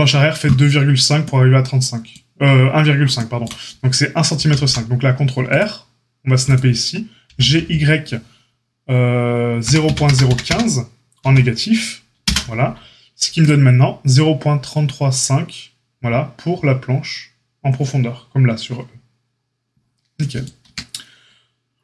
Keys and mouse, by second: 4.3 ctrl+r, 7.2 g, 13.4-20.6 drag, 20.6 Tab, 20.6-21.8 middle drag.